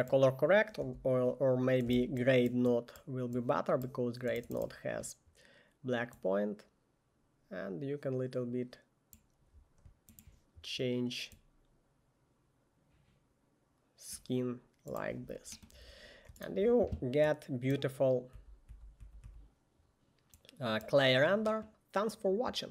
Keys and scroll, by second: 1.0 Delete, 2.0 g, 18.5-19.4 typing.